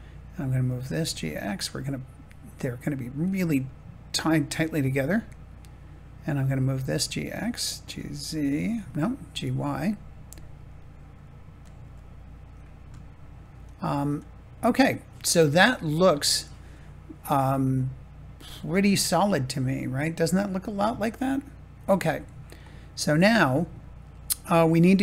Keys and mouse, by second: 0.6 click, 1.0 g, 1.2 x, 3.2-4.2 drag, 6.7 g, 6.9 x, 7.6 click, 7.8 g, 8.2 z, 9.2 g, 9.6 y, 11.6 click, 13.0 shift+middle click, 18.5 shift+middle click, 23.5 shift+middle click.